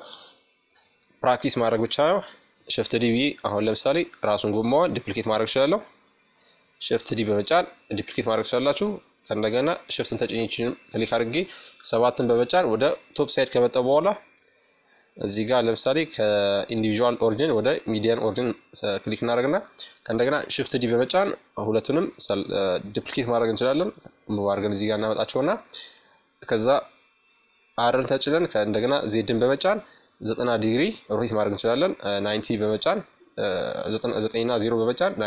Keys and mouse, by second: 1.8-3.6 drag, 6.8-8.5 drag, 8.1-9.8 right drag, 9.6 KP_7, 11.3-13.0 middle drag, 13.6-15.3 drag, 18.2 shift+d, 20.9-22.6 drag, 22.6 middle click, 31.3-33.2 drag, 35.0 ctrl+z.